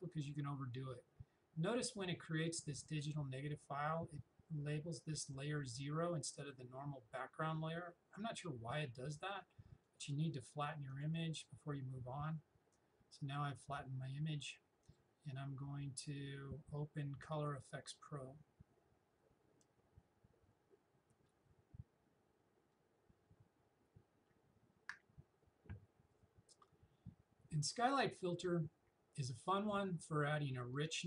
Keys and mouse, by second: 9.9 click, 17.3 click, 29.7-31.0 drag.